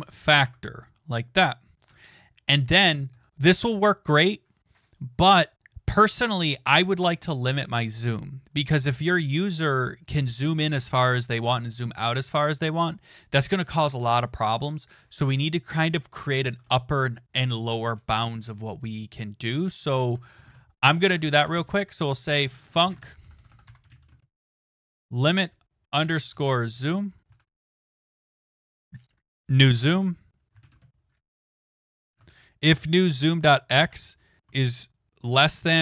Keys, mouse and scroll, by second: 0.0-0.7 typing, 1.9 Return, 2.7 Return, 3.1 BackSpace, 5.6 click, 9.4 click, 10.1 click, 16.5 BackSpace, 16.6 BackSpace, 17.2 Return, 19.4-26.9 typing, 28.7-32.7 typing, 35.6-35.8 typing.